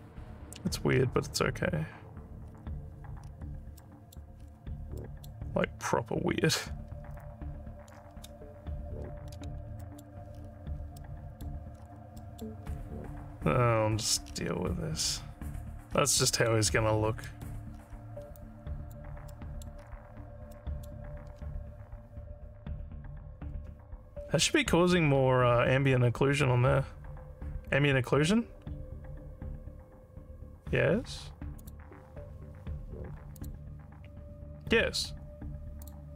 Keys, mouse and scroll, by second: 2.5 alt+scroll down 2, 3.2 alt+scroll up 2, 3.8 alt+middle click, 4.4 alt+scroll down 2, 5.0 alt+middle click, 9.8 alt+middle click, 11.0 alt+middle click, 11.8 alt+scroll down 2, 12.2 alt+middle click, 12.6 alt+scroll down 1, 14.3 alt+scroll up 3, 15.9 alt+scroll down 2, 16.3 alt+middle click, 16.9 alt+scroll down 1, 17.2 alt+middle click, 17.7 alt+scroll up 4, 18.4 alt+click, 19.3 alt+middle click, 19.8 scroll down 2, 20.5 alt+middle click, 31.6 click, 33.3 click, 35.8 click.